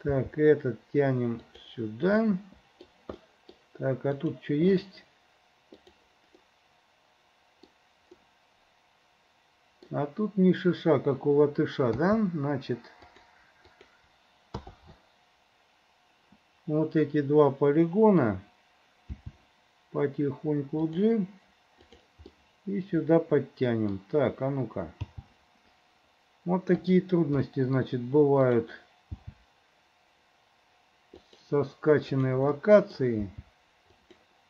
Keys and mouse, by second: 0.3 g, 2.3 middle click, 3.3 middle click, 4.3 click, 6.5-7.8 middle drag, 8.2-10.0 middle drag, 12.0 k, 19.3 g, 22.6-24.1 middle drag, 25.2 g, 27.6 middle click, 27.8 click, 29.2 g, 32.1 click, 32.6 middle click, 33.3 g.